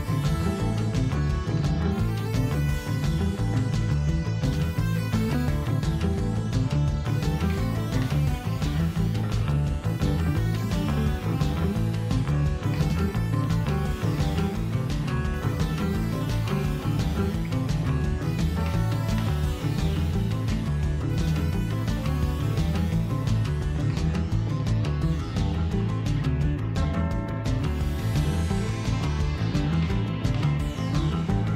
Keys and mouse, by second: 1.1 click, 2.7 right click, 3.6-4.7 drag, 4.9-6.4 ctrl+middle drag, 6.4 right click, 6.9 click, 7.7 right click, 8.0-9.1 drag, 9.1 right click, 9.7 click, 10.5-10.9 shift+middle drag, 10.9 right click, 11.4 click, 12.3 ctrl+shift+middle click, 13.0 right click, 13.5 click, 14.1-15.5 ctrl+middle drag, 16.0-16.6 drag, 16.6-20.2 ctrl+middle drag, 20.2-20.8 right drag, 20.8 click, 21.2-22.2 drag, 22.8 ctrl+shift+middle click, 23.5 click, 25.2-25.7 drag, 25.7 ctrl+shift+middle click, 26.6-27.5 drag, 27.5 middle click, 28.0-28.7 drag, 28.7-29.3 ctrl+middle drag, 29.3 right click, 30.2 click, 31.2 drag.